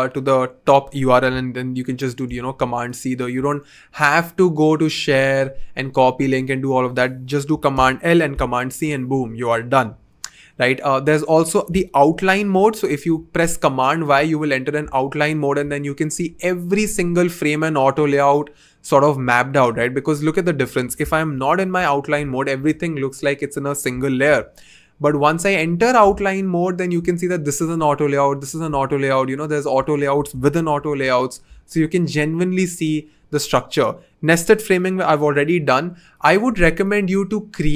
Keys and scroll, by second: 2.2 super+c, 7.7 super+l, 8.3 super+c, 12.1 super+y, 21.3 super+y, 24.2 super+y, 30.6 super+y.